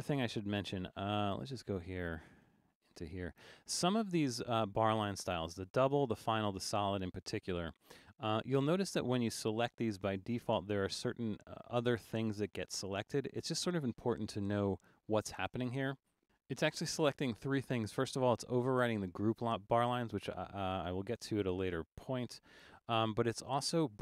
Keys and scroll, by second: 2.3 Return.